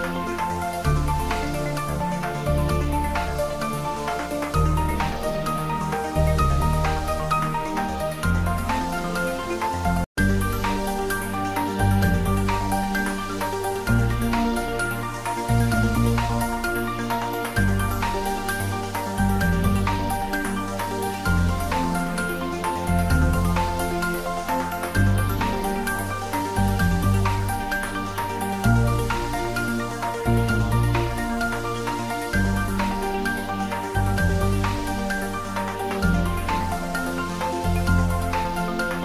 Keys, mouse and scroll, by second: 2.1-5.3 middle drag, 5.3 ctrl+z, 24.2 scroll down 2, 25.6 shift+z, 26.1 scroll down 1, 26.2 middle click, 26.8-27.9 scroll up 1, 31.3 Tab, 32.6 scroll up 1, 33.0 click, 33.6 scroll down 1, 33.8 click, 35.0-36.6 middle drag, 36.6 scroll down 1, 37.8 z, 38.9 click.